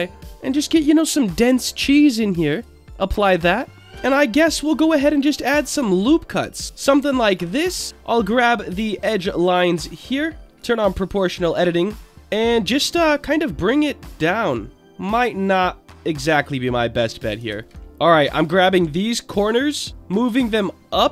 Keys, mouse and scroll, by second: 0.2 click, 0.8-1.5 middle drag, 2.5 drag, 3.8 ctrl+Tab, 3.8 click, 3.8 middle click, 3.9 ctrl+r, 6.5 click, 8.2 middle click, 8.4-8.8 scroll up 1, 9.5 click, 10.4 middle click, 11.0 click, 11.4 click, 12.1 right click, 12.1 scroll up 2, 12.1 g, 12.9-14.8 drag, 15.4 click, 16.5 click, 17.5 ctrl+z, 17.8 click, 18.3 shift+click, 18.7 middle click, 19.9-21.1 drag.